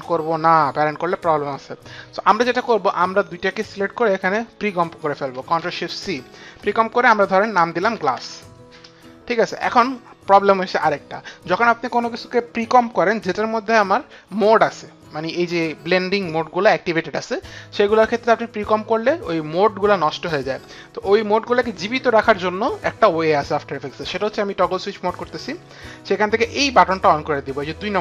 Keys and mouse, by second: 1.5 click, 2.9 click, 3.5 ctrl+click, 5.4 ctrl+shift+c, 7.2-8.5 typing, 7.3 ctrl+click, 7.5 ctrl+click, 8.8 Return, 25.1 click.